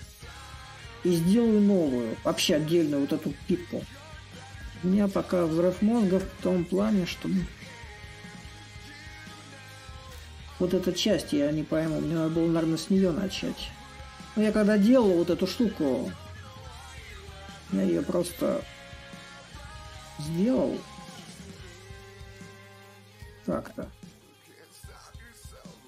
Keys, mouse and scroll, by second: 6.1 click, 22.5-25.8 drag.